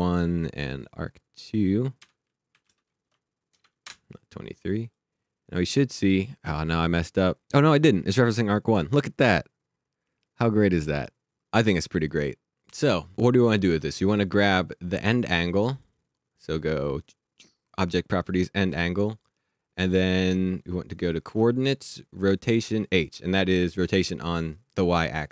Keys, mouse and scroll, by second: 1.4 click, 1.9 Return, 2.5 Right, 2.6 space, 3.0 2, 3.5 BackSpace, 3.8 Return, 4.8 click, 11.2 click, 12.1 click, 13.1 click, 15.7 click, 18.2 click, 22.6 click.